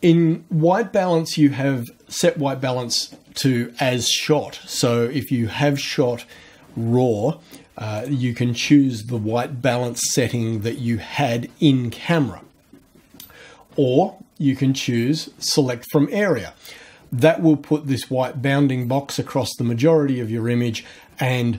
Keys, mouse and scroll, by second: 8.0 click, 15.1 click.